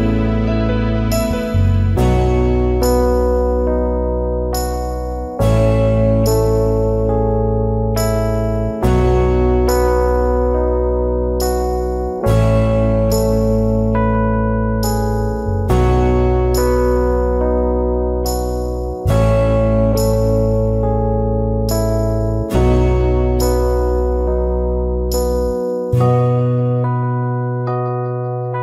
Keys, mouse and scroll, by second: 1.8 alt+scroll down 1, 1.9 space, 4.0 alt+scroll down 1, 4.2 space, 5.0 alt+scroll up 1, 6.2 alt+scroll up 1, 6.4 space, 13.7 alt+click, 15.0 alt+shift+click, 18.2 alt+scroll down 1, 18.3 space, 19.1 alt+scroll down 1, 20.3 alt+scroll up 1, 21.4 alt+scroll up 1, 22.1 alt+shift+click, 23.2 alt+scroll down 1, 23.4 space.